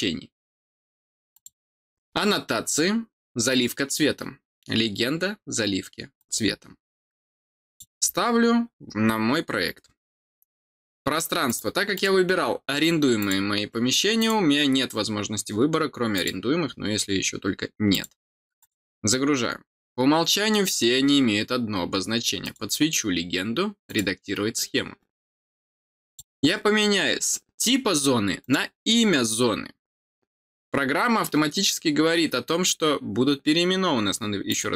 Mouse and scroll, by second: 1.3 click, 6.1 click, 7.6 click, 11.4 click, 11.9 click, 13.1 click, 14.1 click, 16.1 click, 17.9 click, 18.5 click, 22.4 click, 23.8 click, 26.0 click, 28.4 click, 34.4 click.